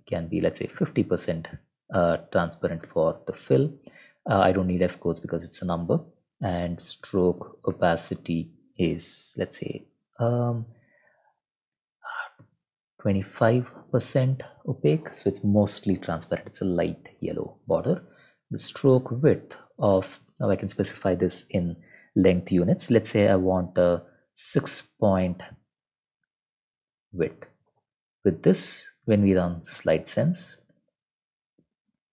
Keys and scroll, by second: 0.0-1.4 typing, 2.8 Return, 6.1-8.1 typing, 12.4 ., 13.1 2, 13.3 5, 17.7 Return, 17.7-20.7 typing, 24.0-27.3 typing, 26.2 ctrl+Left, 27.4 ctrl+End, 27.7 ctrl+s, 29.4-31.2 typing.